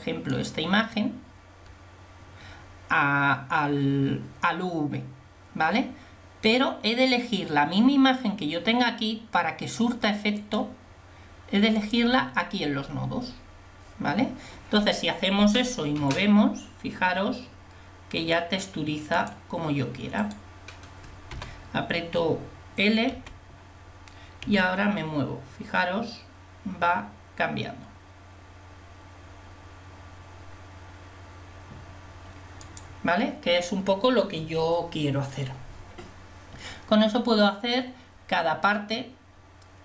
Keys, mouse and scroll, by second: 16.7 g, 20.3-22.6 drag, 22.6 l, 23.3 l, 24.7 g.